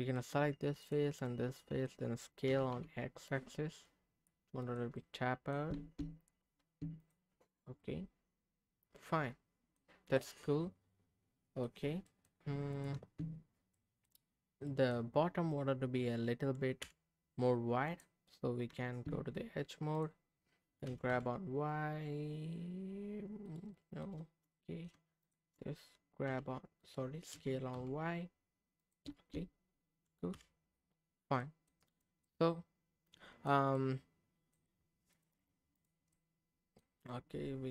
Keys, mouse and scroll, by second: 0.8 shift+click, 1.3 middle click, 2.4 s, 2.7 x, 4.6 click, 4.9 middle click, 5.7 Tab, 5.8 Tab, 7.4 click, 7.8-9.7 middle drag, 9.9-10.4 scroll down 3, 10.2-11.7 middle drag, 11.9 scroll up 1, 12.0 middle click, 12.7 click, 12.9 Tab, 13.6 scroll up 1, 13.7 middle click, 14.7 middle click, 16.8 /, 17.9 click, 18.3-18.7 scroll down 1, 18.7 Tab, 19.9 click, 20.9 g, 21.1 y, 23.4 right click, 23.7 middle click, 24.5 middle click, 25.2 shift+click, 26.3 g, 26.8 right click, 27.3 s, 27.7 y, 28.8 click, 29.1 Tab, 30.3 /, 31.1 scroll down 1, 31.4 middle click, 31.9 click, 32.2-33.4 middle drag, 33.7 middle click, 35.1 click, 35.7 click, 36.1 middle click, 36.1-36.8 scroll up 1.